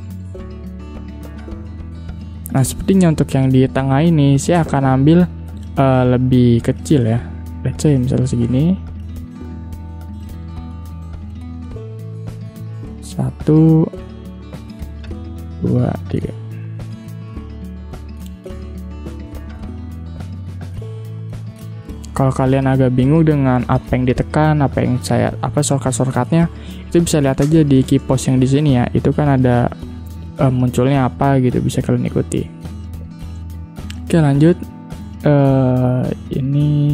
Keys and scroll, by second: 7.8 shift+x, 16.1 ctrl+d, 17.8 ctrl+g, 27.4 space, 32.6 space, 36.7 shift+x.